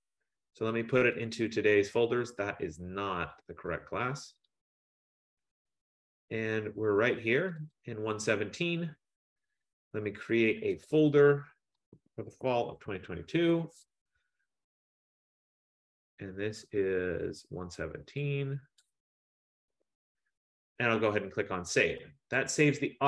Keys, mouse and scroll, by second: 0.0 click, 0.2 click, 1.3 click, 1.5 click, 3.4 click, 4.5 click, 4.9 click, 5.8 middle click, 7.6 click, 7.8 click, 10.9 click, 12.0-13.3 typing, 13.9 Return, 16.0 click, 16.6 click, 17.9 click, 18.9 click, 19.1-20.2 typing, 22.5 click.